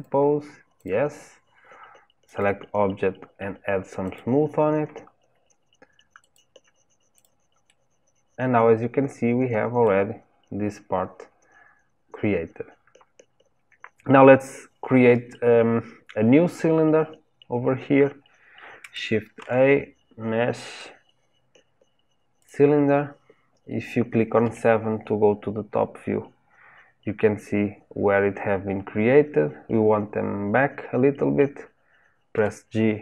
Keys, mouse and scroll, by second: 0.7 click, 2.2-5.2 drag, 6.2 click, 7.1 click, 7.6-10.7 middle drag, 19.4 shift+a, 24.4 KP_7, 32.3 g.